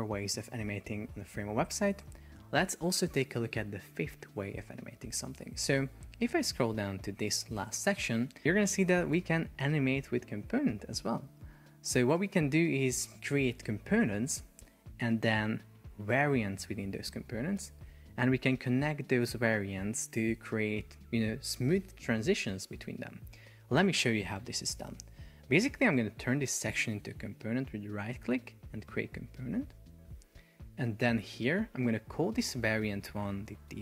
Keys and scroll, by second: 33.5 shift+d.